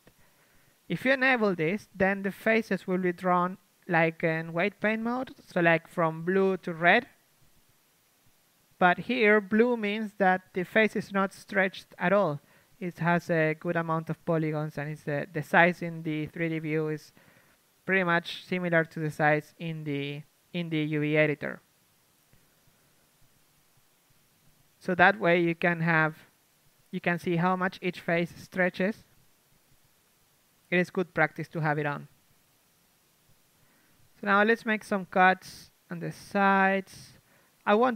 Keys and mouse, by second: 5.0 n, 7.1 KP_3, 11.8 KP_1, 14.5 right click, 15.1 a, 15.8 b, 15.8 s, 17.8 s, 20.5 a, 21.1 c, 22.8 ctrl+z, 23.2 s, 24.7-26.4 drag, 25.3 g, 27.1 a, 27.8 ctrl+z, 28.0 ctrl+z, 28.1 ctrl+z, 28.3 ctrl+z, 28.4 ctrl+z, 29.2 a, 30.2 shift+space, 30.8-32.5 drag, 32.5-33.8 right drag, 33.1 ctrl+Tab, 33.6 a, 33.8 a, 33.9 a, 34.1-35.1 right drag, 34.4-35.5 drag, 35.5-37.9 middle drag, 37.5-37.9 right drag.